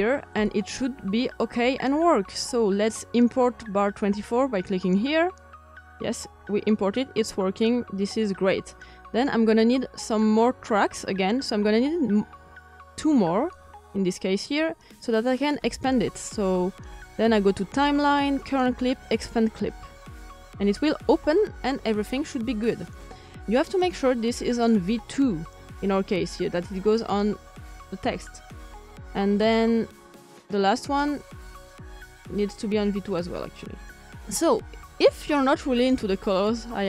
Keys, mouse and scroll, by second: 6.9-17.4 drag, 19.4-21.5 drag, 21.9-27.9 drag, 29.8 click, 36.3-36.8 drag.